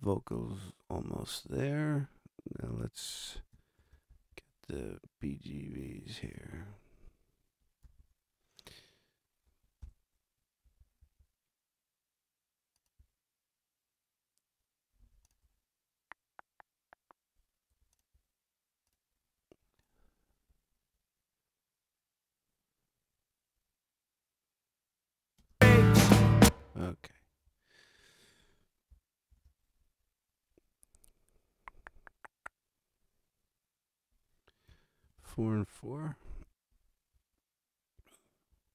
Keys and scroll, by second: 3.7 super+=, 7.8 t, 9.8 ctrl+alt+super+Up, 25.4 space, 27.2 space, 29.3 super+=, 35.0 super+=, 37.1 r, 38.5 r.